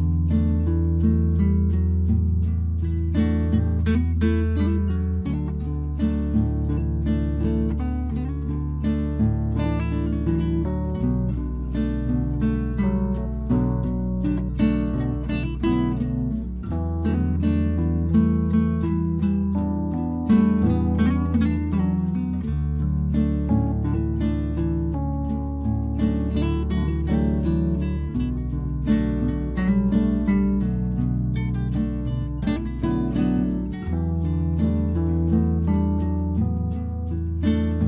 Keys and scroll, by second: 18.8 Return, 36.1 Return.